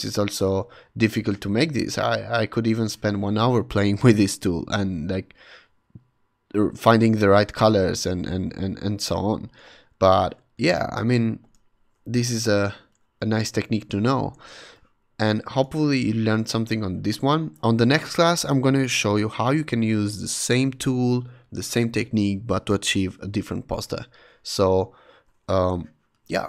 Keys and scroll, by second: 10.2 super+t, 12.3 Return, 13.3 Return, 14.3 super+t, 25.5 Return.